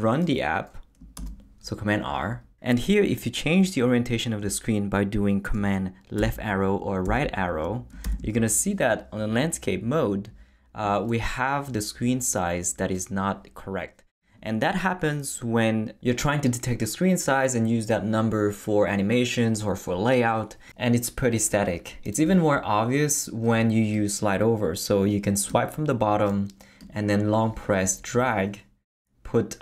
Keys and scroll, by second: 1.2 super+r, 6.2 super+Left, 7.1 super+Right, 8.0 super+Left.